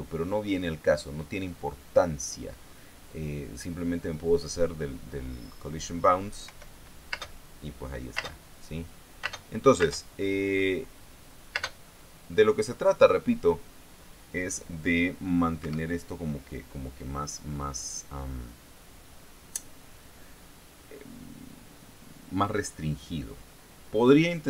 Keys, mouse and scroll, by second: 4.1 click, 7.0 p, 8.7 space, 9.8 space, 12.1 space, 16.1 Escape.